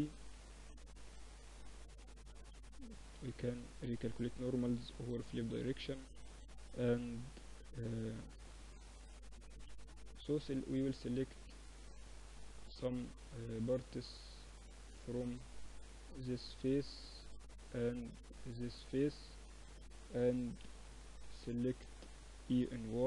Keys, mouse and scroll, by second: 1.1 Tab, 1.4 a, 1.6 a, 2.2 ctrl+n, 2.6 Tab, 3.3 Tab, 4.0 t, 4.9-6.0 drag, 5.1 t, 5.7 Tab, 6.0-7.6 middle drag, 8.2 middle click, 8.5 Tab, 9.4 Tab, 9.9 middle click, 10.1 Tab, 10.2 middle click, 10.4 click, 10.8 middle click, 10.8 click, 13.3-14.7 middle drag, 14.7-18.4 drag, 15.3-19.8 right drag, 19.2 KP_1, 19.8 KP_3, 21.6 e.